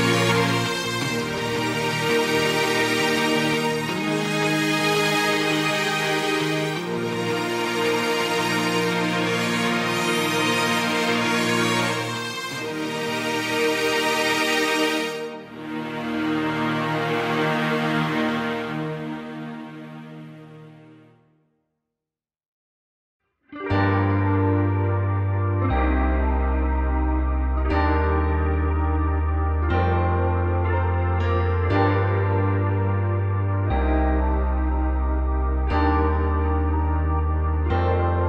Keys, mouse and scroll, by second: 0.4 g, 2.0 Tab, 3.4 click, 3.8-4.4 scroll up 1, 4.4-4.8 scroll up 1, 4.8 Tab, 7.3 ctrl+KP_1, 7.8 click, 8.1-9.5 scroll down 3, 9.5 click, 10.4-12.6 middle drag, 12.6-13.1 scroll up 1, 13.1 KP_1, 14.2 ctrl+KP_1, 15.8 click, 16.4-19.4 scroll up 1, 19.4 click, 20.1 v, 20.8 g, 22.4 click, 22.8 g, 23.9 Tab, 25.4 middle click, 26.1 click, 26.3-27.8 middle drag, 27.8 click, 28.3 KP_1, 28.9 click, 29.1 scroll up 1, 29.3 Tab, 31.1-33.5 drag, 33.5-34.4 scroll up 4, 34.4 a, 34.9 s, 35.6 s, 36.9 g, 38.1 Tab.